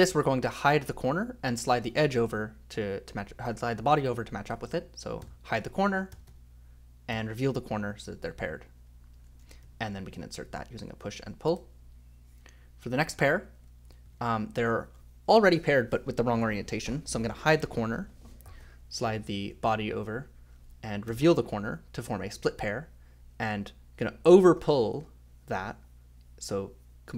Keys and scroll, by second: 5.2 k, 6.1 j, 6.3 j, 7.1 i, 8.9-11.5 typing, 13.3-14.7 typing, 17.5 k, 19.0 j, 19.2 j, 21.1 o, 23.5 l, 24.3 r, 24.6 r.